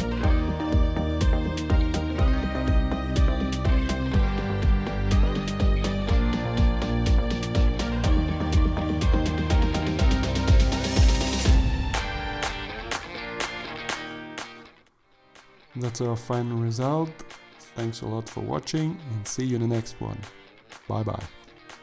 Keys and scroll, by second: 0.5 Return.